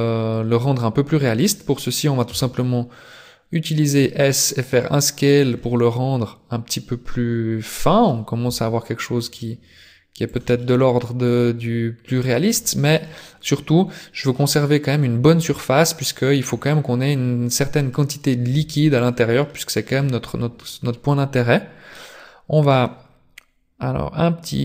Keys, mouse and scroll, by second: 0.3 middle click, 2.3 s, 5.6 middle click, 8.5 s, 10.6 middle click, 12.7 scroll up 3, 13.0 middle click, 16.1 middle click, 16.5 scroll down 6, 17.0 middle click, 18.5 s, 19.4 middle click, 21.9 scroll up 4.